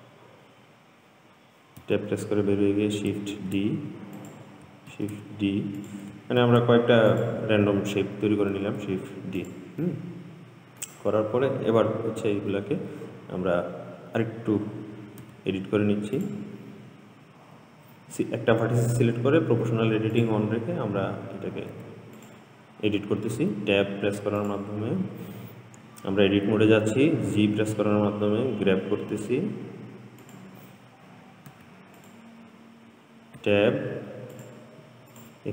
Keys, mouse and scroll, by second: 2.0 Tab, 3.6 shift+d, 5.1 shift+d, 6.6 shift+d, 9.0 shift+d, 10.1-13.1 middle drag, 15.5 Tab, 16.4 click, 19.0 g, 22.0 Tab, 22.4 click, 23.6 Tab, 24.6 click, 27.5 g, 31.8 Tab, 32.2 click, 33.6 Tab, 34.6 click, 35.4 click.